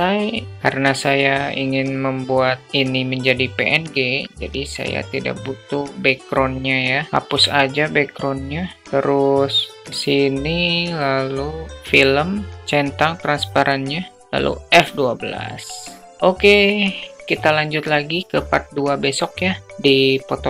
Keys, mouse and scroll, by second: 5.3 click, 12.4 click, 14.4 click.